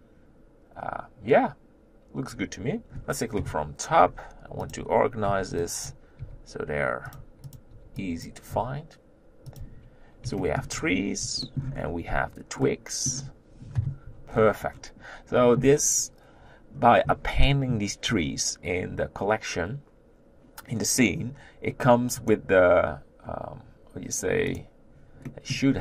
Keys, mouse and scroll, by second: 2.4 click, 3.3 KP_7, 4.7 click, 5.9 b, 6.2 g, 7.6 click, 8.3 b, 8.5 g, 10.4 shift+middle click, 10.7-11.4 scroll up 6, 11.4 shift+middle click, 11.8-12.6 scroll up 3, 12.6-13.7 middle drag, 13.7 KP_7, 14.3-17.9 scroll down 11, 17.9-21.3 scroll down 2, 24.5 click, 25.2-25.7 middle drag, 25.7-25.8 scroll up 1.